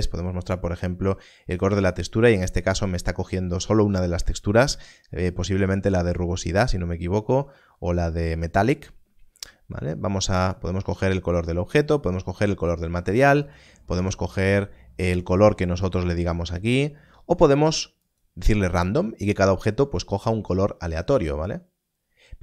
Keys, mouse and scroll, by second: 0.0 click, 10.4 click.